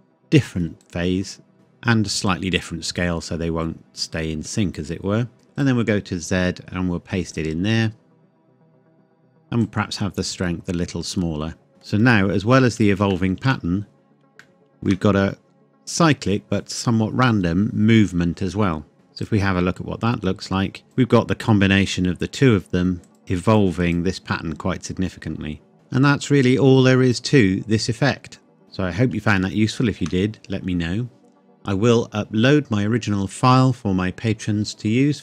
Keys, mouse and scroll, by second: 1.5 middle click, 2.3 click, 5.5 click, 9.9 click, 11.7 middle click, 12.4-13.1 scroll up 1, 13.1 shift+middle click, 13.8-14.3 scroll up 1, 14.4 shift+middle click, 18.9 KP_0, 19.2 click, 25.7 middle click, 26.7 click, 28.6 scroll up 1, 29.4 shift+middle click.